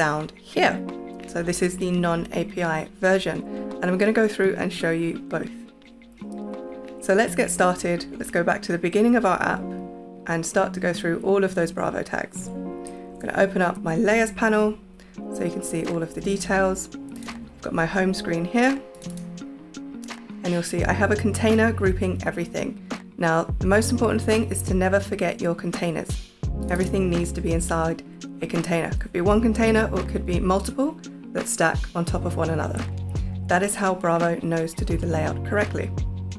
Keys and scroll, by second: 12.8 super+y.